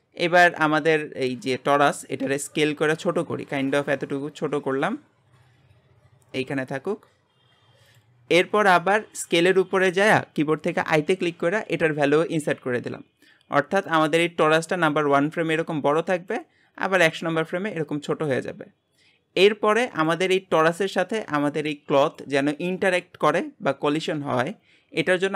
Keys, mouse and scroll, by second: 2.3 s, 14.9-20.7 drag, 20.7-25.1 middle drag, 25.1 click.